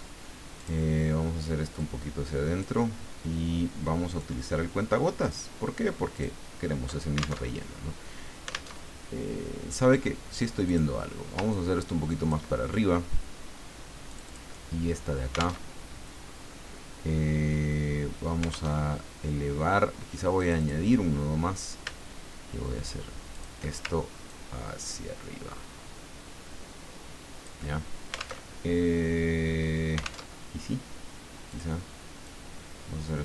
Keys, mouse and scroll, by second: 0.6 click, 1.8-2.9 drag, 4.1 click, 5.2 click, 6.1 click, 7.4 alt+Tab, 8.7 alt+Tab, 10.6 click, 11.5-12.6 ctrl+drag, 14.1 click, 15.6 alt+Tab, 18.7 alt+Tab, 20.4 click, 23.3 shift+click, 24.3-28.0 ctrl+drag, 28.4 alt+Tab, 30.2 alt+Tab, 31.5 click, 32.2-33.2 drag.